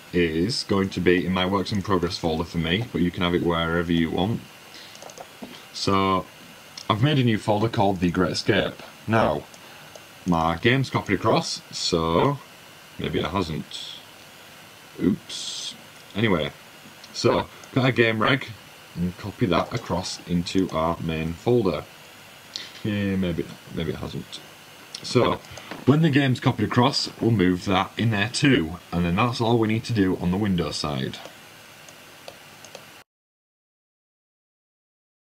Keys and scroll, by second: 0.2 w, 2.4 w, 2.7 n, 21.8 super+fn+Up, 22.3 Left, 22.5 Down.